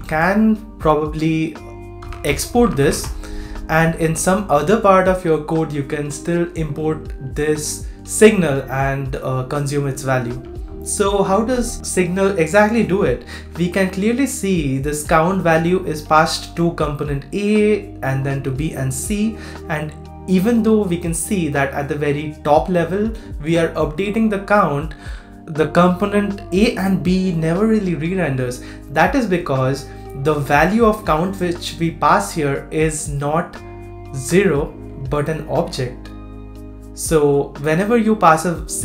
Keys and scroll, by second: 10.2 super+z, 10.7 super+z.